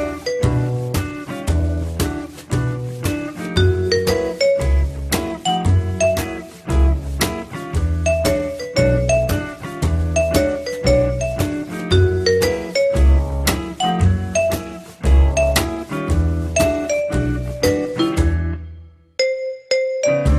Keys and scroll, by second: 5.3 F3.